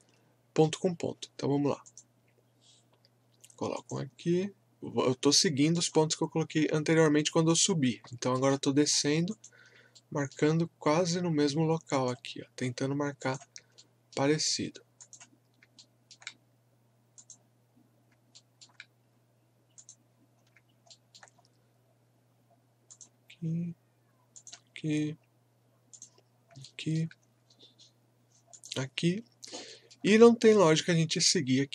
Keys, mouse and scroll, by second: 1.8 click, 8.1 alt+middle click, 9.3 click, 9.9 alt+middle click, 11.9 click, 13.7 alt+middle click, 15.0 click, 15.8-17.1 alt+middle drag, 17.1 click, 18.4 alt+middle click, 19.8 click, 20.3 scroll down 1, 20.9 alt+middle click, 21.4-21.7 scroll up 1, 22.9 click, 26.6 alt+middle click, 27.2 scroll up 1, 28.5 click, 29.0 scroll up 1, 29.7 alt+middle click.